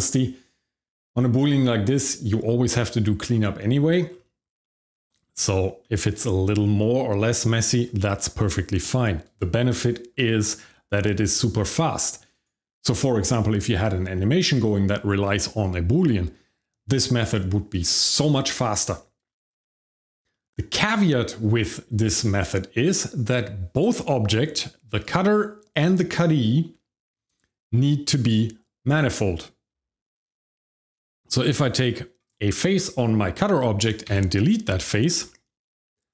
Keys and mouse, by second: 4.6 shift+middle drag, 5.1 middle click, 5.8 shift+middle click, 6.8-7.1 middle drag, 7.6 shift+middle click, 8.0 middle drag, 8.8 click, 10.2 g, 12.3 right click, 19.3 shift+middle drag, 19.6 middle drag, 20.3 middle drag, 24.9 click, 25.8 click, 28.3 click, 31.2 Tab, 32.2 click, 34.1 x.